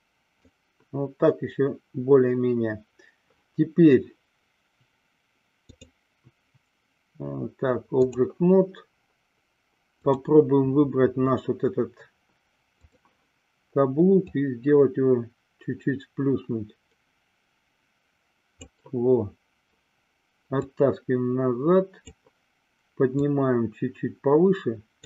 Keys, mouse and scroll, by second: 6.1-8.6 drag, 13.0 click, 14.4-18.8 drag, 20.8-22.3 drag, 23.3-25.0 drag.